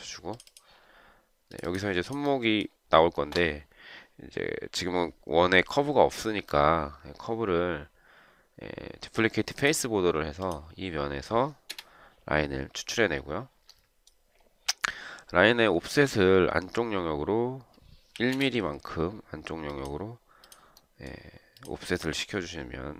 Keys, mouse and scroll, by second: 11.9 Return, 18.3 1, 18.5 Return.